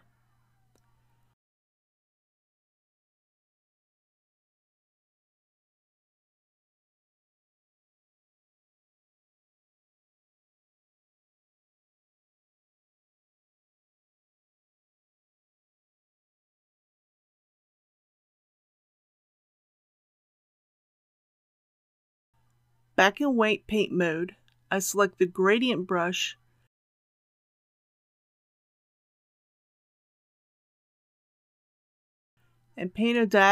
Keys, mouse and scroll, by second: 5.6-6.9 typing, 7.2 Return, 9.1 click, 11.4 Tab, 13.0-33.5 drag.